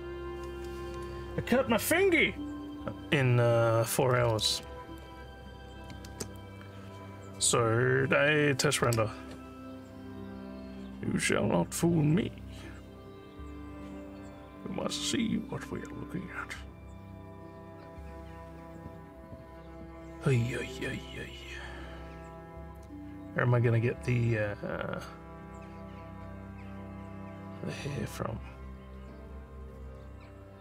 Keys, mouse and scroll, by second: 4.7 alt+middle click, 6.2 ctrl+s.